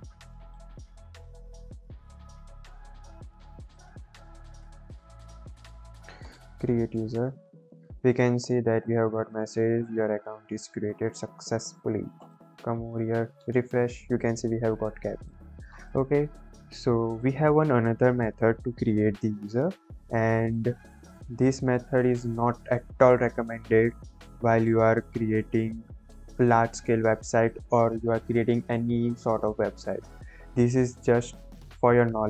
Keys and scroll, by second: 25.8 ctrl+j.